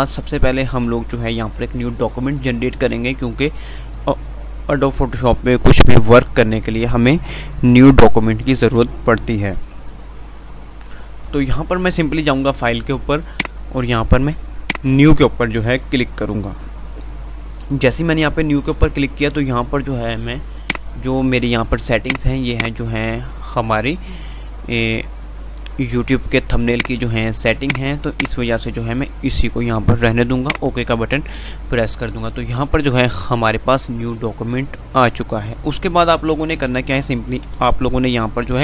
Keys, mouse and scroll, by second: 1.7 F5, 3.5 F5, 12.5 F5, 12.5 typing, 32.8 F5, 33.5 typing, 37.7 F5.